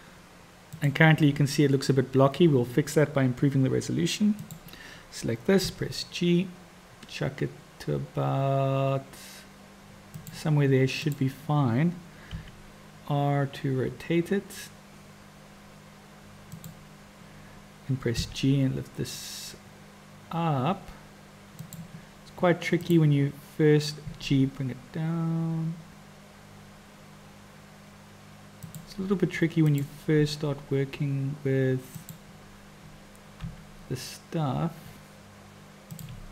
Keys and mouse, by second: 4.3 click, 5.7 g, 12.3 r, 18.2 g, 24.1 g, 29.7 click, 30.2 g, 33.4 r.